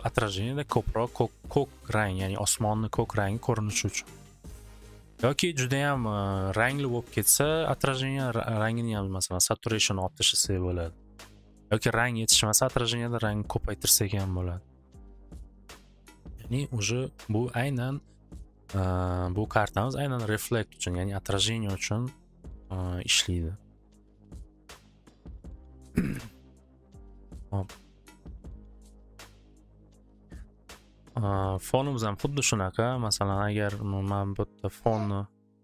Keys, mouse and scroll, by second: 8.7-13.0 drag, 15.4 click, 15.9 click, 16.1 click, 16.1 typing, 16.3 Return, 18.7 click, 20.1 scroll, 21.0 click, 21.9 click, 25.5-26.3 typing, 25.5 click, 25.6 click, 26.4 click, 26.6 click, 26.8 click, 27.4 click, 28.2 click, 28.8-29.6 typing, 29.5 click, 31.6 middle click, 33.2 click, 33.8 click.